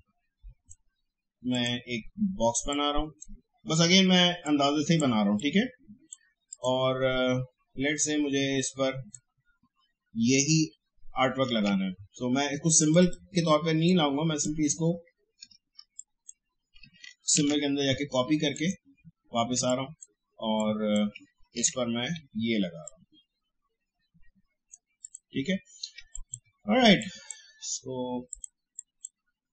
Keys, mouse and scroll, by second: 11.5 ctrl+z, 12.8-15.7 drag, 15.7 space, 15.9 click, 16.3 space, 17.3 ctrl+c, 18.5 click, 19.5 space, 19.7 click, 20.1 space, 20.5 click, 21.5 ctrl+v, 22.8-25.0 drag, 25.9 space, 26.1-29.5 drag.